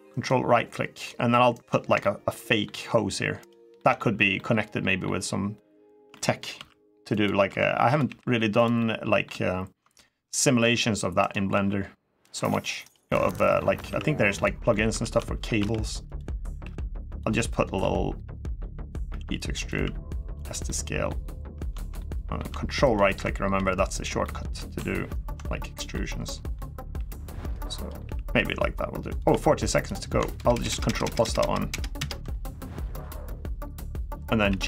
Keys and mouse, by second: 0.0 ctrl+click, 0.8 ctrl+click, 1.8 middle click, 3.2 ctrl+click, 3.5 ctrl+middle click, 4.1 middle click, 5.9 shift+middle click, 6.3 r, 6.9 click, 7.3 s, 7.6 click, 7.8 g, 8.3 click, 8.5 middle click, 9.7 middle click, 10.4 r, 11.0 right click, 11.3 r, 12.0 click, 12.6 ctrl+right click, 12.9 ctrl+middle click, 13.6 s, 14.1 click, 14.4 middle click, 14.8 ctrl+z, 15.3 r, 15.8 click, 16.4 g, 16.9 click, 17.1 middle click, 18.2 click, 18.2 middle click, 18.9 e, 19.3 click, 19.5 s, 20.1 click, 20.4 middle click, 21.7 middle click, 23.3 r, 24.0 middle click, 25.0 ctrl+click, 25.7 middle click, 26.7 g, 27.4 middle click, 27.8 g, 28.8 click, 29.0 r, 29.5 click, 30.2 ctrl+KP_Add, 30.3 ctrl+KP_Add, 30.5 ctrl+KP_Add, 30.6 ctrl+KP_Add, 30.8 ctrl+KP_Add, 31.3 ctrl+KP_Add, 31.8 ctrl+KP_Add, 32.6 middle click, 34.2 g.